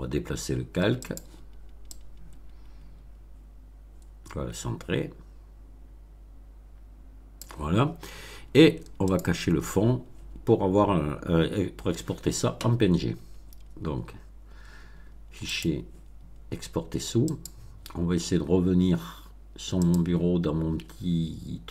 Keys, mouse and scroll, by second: 1.0 click, 1.8-7.5 drag, 9.0 click, 15.4 click, 17.2 click, 19.8 click.